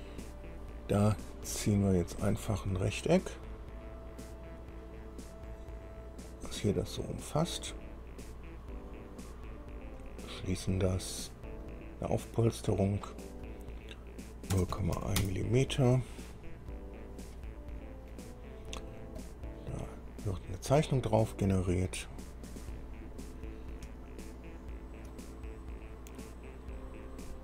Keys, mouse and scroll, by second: 2.2 click, 6.5 click, 8.7 click, 10.2 click, 12.9 click, 14.7 0, 15.0 KP_Decimal, 15.2 KP_1, 15.4 Return, 16.9-18.5 drag, 18.8-19.1 scroll up 1, 19.4 click, 20.2 scroll down 1, 22.1 click, 24.6 shift+click, 27.1-27.4 scroll up 4.